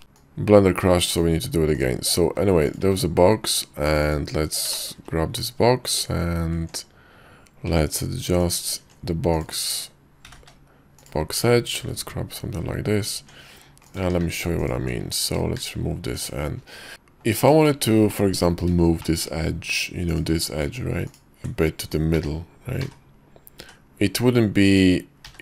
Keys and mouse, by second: 0.0 d, 0.3-2.0 drag, 2.8 click, 3.0 q, 8.5 click, 8.9 Tab, 9.4 click, 10.4 g, 11.9 ctrl+b, 13.3 Tab, 14.1 q, 15.7 shift+2, 16.3 Tab, 16.9-17.4 drag, 17.8 shift+click, 18.2 click, 19.1 shift+click, 20.2 click, 21.2 ctrl+click, 22.2 g.